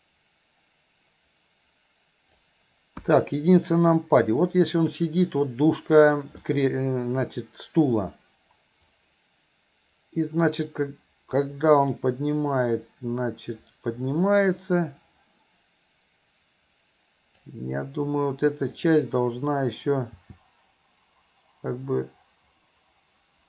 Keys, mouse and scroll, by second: 9.0-17.6 drag, 18.8 click, 20.2 g.